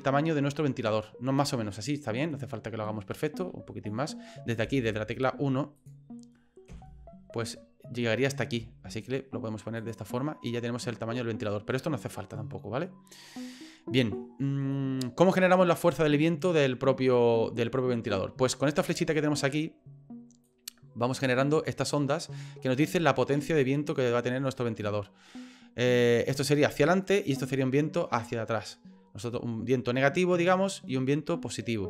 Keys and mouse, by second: 0.0-3.2 middle drag, 3.4 s, 6.7 KP_1, 8.6 s, 10.2-14.2 middle drag, 14.8-18.1 middle drag, 18.9 shift+middle click, 20.6-21.9 drag, 23.6-31.8 drag.